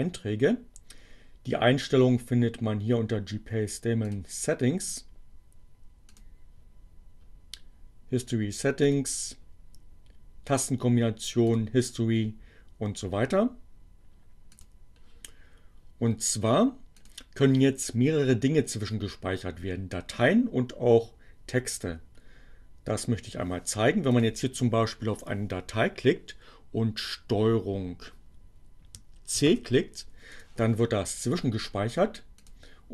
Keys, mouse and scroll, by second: 4.1 click, 5.9 click, 8.8 click, 11.4 click, 14.0 click, 24.2 click, 29.3 ctrl+c, 29.8 click, 32.4 click.